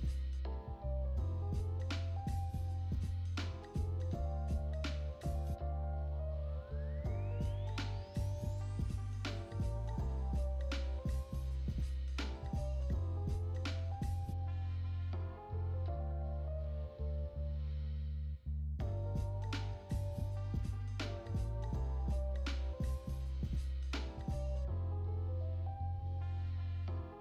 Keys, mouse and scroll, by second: 3.8 KP_1, 18.5 click, 21.8 click, 23.0-27.2 shift+middle drag.